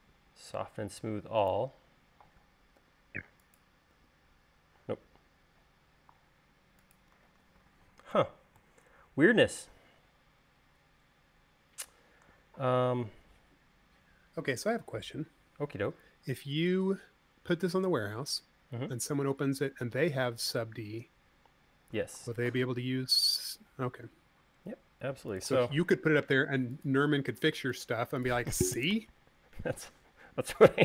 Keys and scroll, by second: 3.3 u, 4.4 u, 7.6 super+z, 23.9 super+z, 29.1 BackSpace.